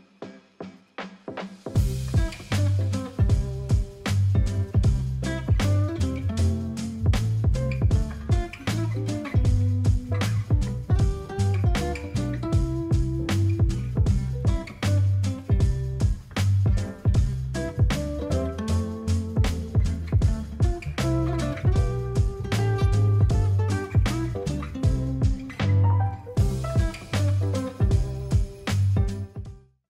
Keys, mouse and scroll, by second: 23.2 ctrl+0, 23.6 ctrl+s.